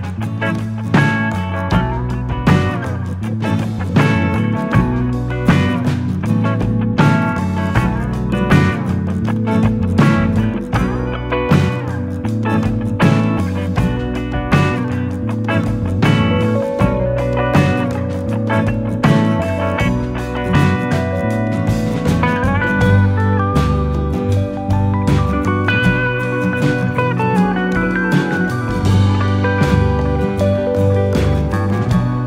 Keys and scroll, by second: 4.1 u, 13.8 ctrl+d, 14.6 ctrl+d, 16.8 ctrl+d, 17.9 u, 21.6 BackSpace, 26.4-27.6 typing.